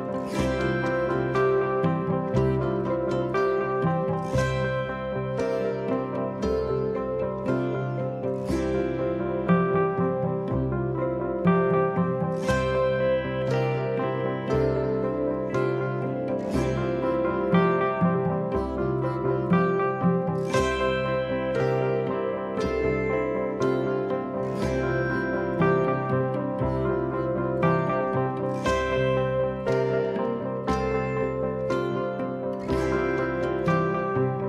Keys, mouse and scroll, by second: 0.0 click, 1.5 ctrl+a, 4.9-7.2 typing, 14.0 click, 14.2-15.3 drag, 16.2-17.1 scroll up 2, 17.1-18.7 scroll up 1, 20.7 click, 21.8 click, 23.9 click, 24.9 click, 29.9 click.